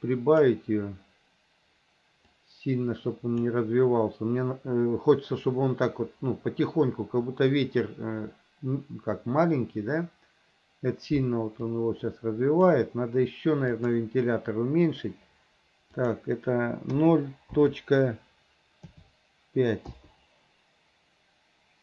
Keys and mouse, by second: 2.5-3.6 drag, 11.8-12.9 drag, 13.9 click, 16.1-20.1 drag.